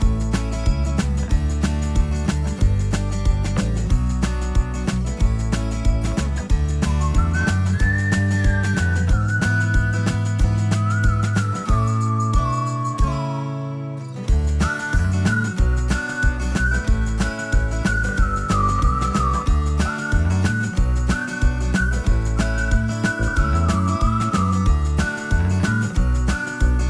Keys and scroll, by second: 1.2 p, 9.8 space, 14.0 m, 18.5 shift+space, 20.6 m, 21.8 Left, 24.6 space.